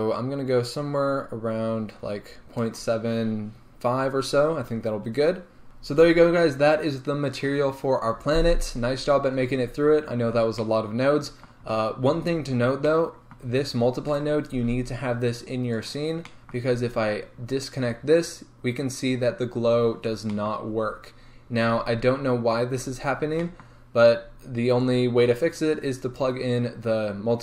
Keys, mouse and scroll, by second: 0.2-5.7 drag, 5.6 scroll down 2, 5.7 g, 14.1 right click, 17.8 click, 19.2 scroll up 1, 24.8 click.